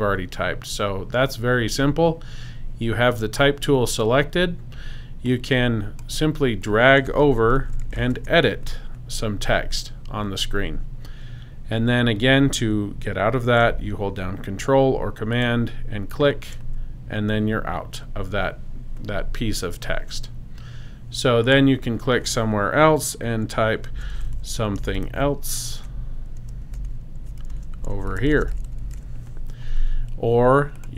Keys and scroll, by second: 7.3-8.6 typing, 23.6-29.3 typing.